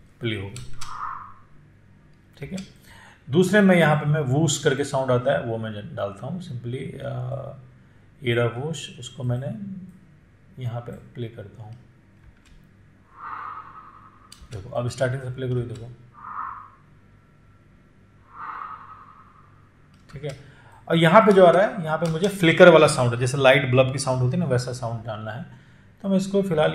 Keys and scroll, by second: 0.9 space, 12.5 space, 20.5 space.